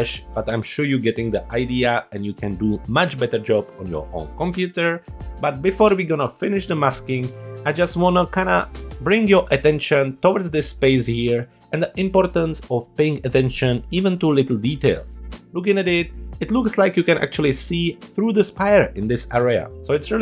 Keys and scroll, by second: 7.7 space.